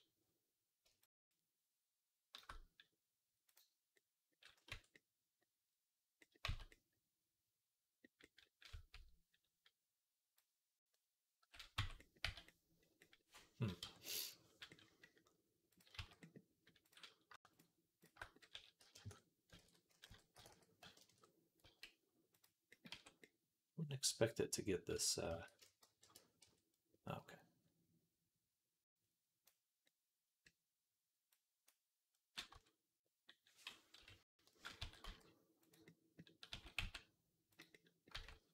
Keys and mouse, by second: 3.5-10.2 middle drag, 4.5 Tab, 6.3 z, 8.5 a, 10.2-16.7 drag, 11.6 Tab, 12.1 z, 13.6 Tab, 15.8 z, 16.7 middle click, 17.4 shift+click, 18.0-19.3 middle drag, 18.4 s, 19.4 ctrl+z, 19.9 ., 20.3 s, 21.5 z, 22.7 Tab, 23.3-29.3 middle drag, 24.8 Tab, 25.1 a, 25.7 shift+n, 26.3 Tab, 28.9-35.5 drag, 32.4 Tab, 33.8 ., 34.6 s, 36.3 s, 37.9 Tab.